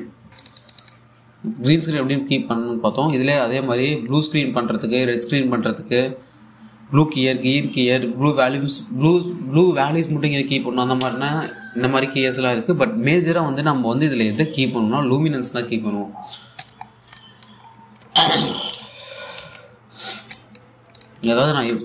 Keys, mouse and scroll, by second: 1.1 click, 17.1-17.7 scroll down 2, 17.2 click, 17.8 alt+click, 18.3-19.3 scroll up 1, 19.3 click, 19.6 1, 20.7 scroll down 1, 21.0 alt+click.